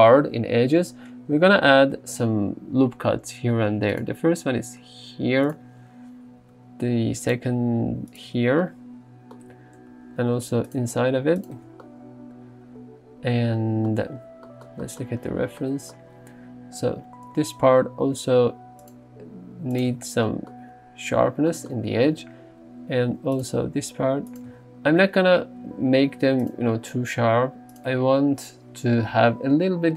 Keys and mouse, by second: 1.8 ctrl+r, 4.0 click, 5.5 click, 6.3 ctrl+r, 7.3 click, 8.2 click, 9.4 Tab, 9.5 Tab, 10.3 ctrl+r, 10.8 click, 11.6 Tab, 15.7 middle click, 16.9 Tab, 18.1 ctrl+r, 18.9 click, 19.8 click, 20.0 Tab, 22.2 Tab, 23.1 ctrl+r, 24.3 click, 24.6 Tab, 25.1 Tab, 26.1 ctrl+r, 26.5 click, 27.8 click, 27.9 Tab.